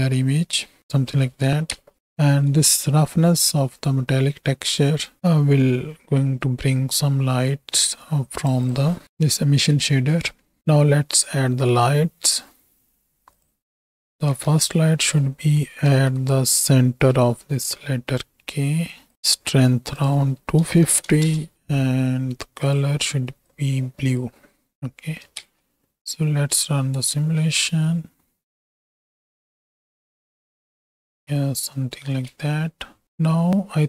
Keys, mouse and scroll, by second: 1.0 n, 1.8 ctrl+space, 2.0 shift+click, 2.7 shift+middle click, 3.7 middle click, 4.9 shift+middle click, 5.2-8.5 drag, 8.8 click, 11.3 shift+a, 14.2 z, 15.9 alt+g, 17.1 g, 20.0-21.2 drag, 22.6 click, 25.5 space, 32.4 space, 33.0 z.